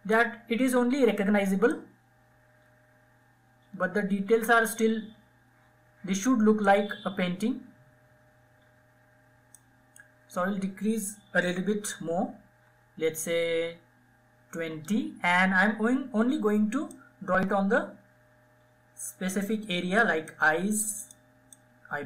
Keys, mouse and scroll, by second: 11.9 [, 12.2 [, 12.8 [, 13.8 [, 16.1-22.0 drag.